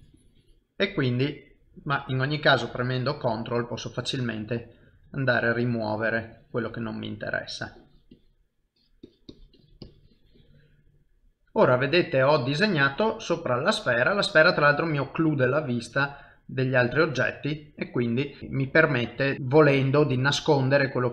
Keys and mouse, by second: 0.7 middle click, 2.3 ctrl+click, 3.5 middle click, 4.3 click, 4.5 click, 4.9 middle click, 5.5 click, 5.5 click, 6.9 middle click, 7.7 click, 8.1 click, 9.3 click, 9.9 click, 10.7 middle click, 11.8 ctrl+middle click, 13.5 shift+middle click, 14.0 middle click, 15.4 ctrl+middle click, 16.1 middle click.